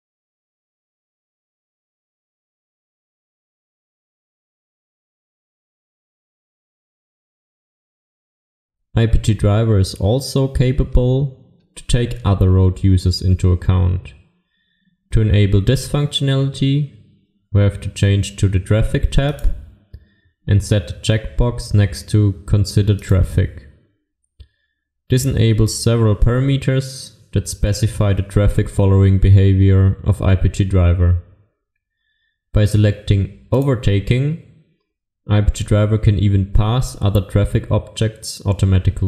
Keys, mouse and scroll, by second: 19.4 click.